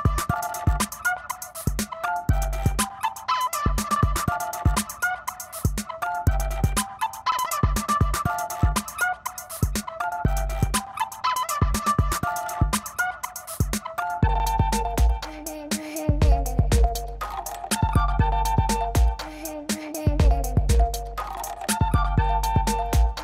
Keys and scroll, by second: 1.8-4.1 typing, 5.4 ctrl+alt+z, 7.3 [, 8.0 ], 8.1 [, 8.5 [, 10.0 ], 10.6 ], 11.9 [, 12.1 ], 12.3 [, 16.0 [, 16.6 ], 17.9 space, 22.1 F9, 22.3 ].